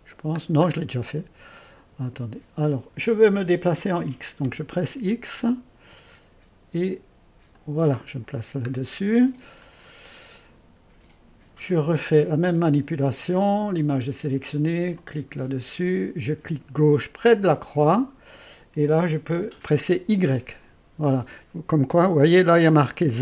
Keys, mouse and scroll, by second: 1.7-3.0 drag, 4.4 x, 7.5-8.8 drag, 8.8-9.6 scroll down 1, 9.6-10.0 scroll down 1, 10.0-12.8 scroll up 1, 15.0 click, 17.1 click, 20.0 y.